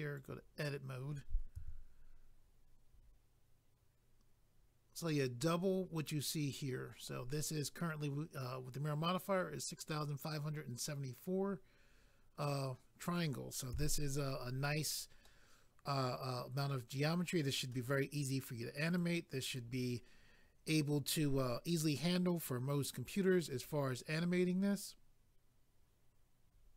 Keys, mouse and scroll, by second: 0.1 click, 0.2 click, 1.5 a, 15.2 middle click, 18.9 click, 19.0 click, 19.5 click, 19.6 click.